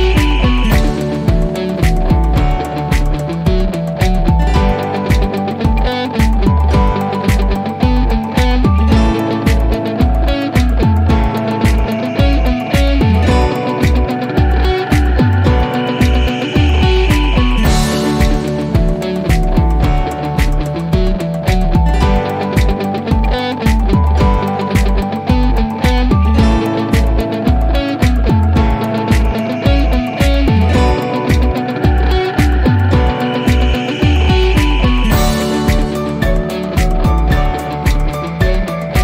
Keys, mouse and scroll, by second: 20.7-22.5 drag, 25.1 click, 26.1 p, 27.6-30.8 alt+middle drag, 31.1-32.2 scroll down 1, 32.2 l, 33.6 scroll down 1, 35.3 click, 37.3 click, 38.7 scroll down 1.